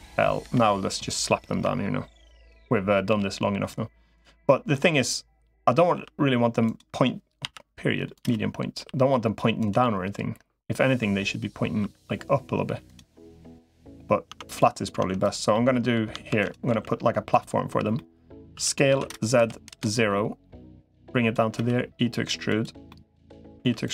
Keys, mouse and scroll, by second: 0.2 l, 1.4 KP_1, 3.0 g, 4.5-5.6 middle drag, 5.8 r, 8.6 r, 9.6-10.8 middle drag, 12.9 middle click, 13.6 click, 14.2 Tab, 14.8 Tab, 15.0 click, 15.3 middle click, 16.2 shift+d, 16.6 s, 17.7 middle click, 18.4 s, 20.8 click, 21.4 e, 22.7 middle click, 23.4 e, 23.8 s.